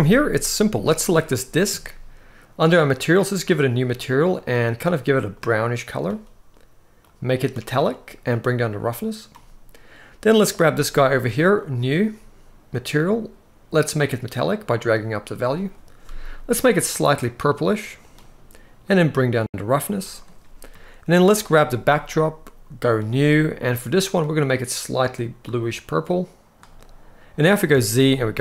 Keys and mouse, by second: 0.8 click, 3.1 click, 4.1 click, 6.9 click, 8.1 click, 11.4 click, 13.7 click, 15.4 click, 18.7 click, 21.0 click, 27.4 z.